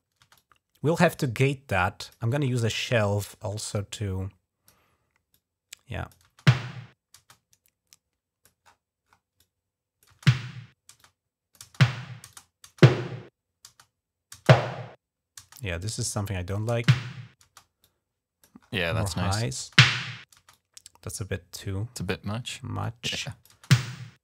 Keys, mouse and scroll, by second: 0.0 space, 0.2-1.9 drag, 3.5-4.5 drag, 5.1 click, 6.1 space, 7.0 space, 7.1-8.3 drag, 8.4 typing, 9.2 click, 9.7-10.4 typing, 10.8 click, 12.1-16.3 drag, 17.6 click, 18.9 click, 20.3-21.9 drag, 22.6 click.